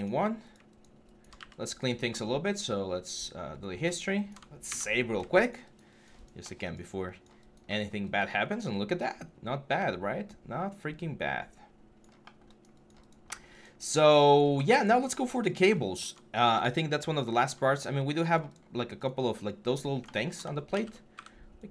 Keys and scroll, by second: 4.4 ctrl+s, 20.5 ctrl+d, 20.9 w.